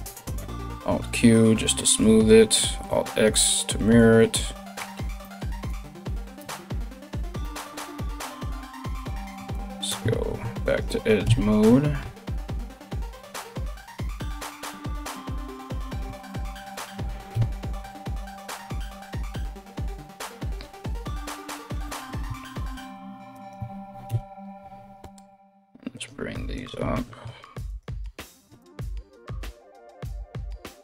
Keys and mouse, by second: 0.3 alt+q, 2.4 alt+x, 5.3 alt+right click, 6.0 KP_1, 7.5 right click, 7.8 right click, 8.5 2, 8.7 right click, 9.1 shift+right click, 9.7 ctrl+z, 10.2 shift+right click, 10.8 KP_1, 11.6 g, 14.7 right click, 15.0 middle click, 15.9 ctrl+right click, 16.1 ctrl+middle click, 16.3 ctrl+right click, 16.5-21.1 middle drag, 16.9 KP_1, 17.9 g, 21.1 right click, 21.3-22.9 middle drag, 22.9 ctrl+right click, 23.2-26.1 middle drag, 23.6 KP_1, 24.6 g, 26.1 right click, 26.2-27.3 middle drag, 27.3 ctrl+right click, 27.4 ctrl+middle click, 28.2 shift+right click, 28.5-30.8 middle drag, 28.7 KP_1, 28.9 g.